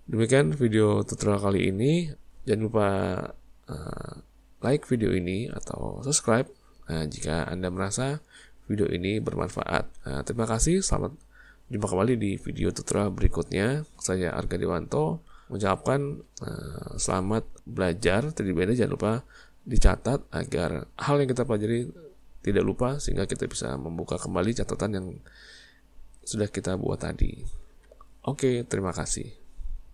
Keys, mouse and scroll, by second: 1.2 shift+middle click, 15.4-17.5 middle drag, 22.6-25.6 middle drag.